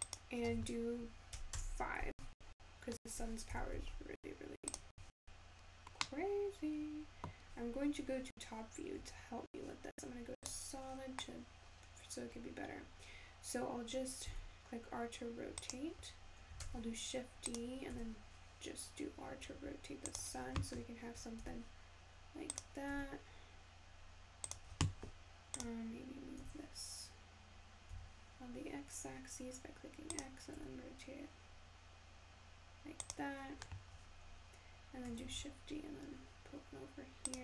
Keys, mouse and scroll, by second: 13.0-15.7 scroll down 3, 27.1 g, 31.1 r, 34.4-35.9 scroll down 1.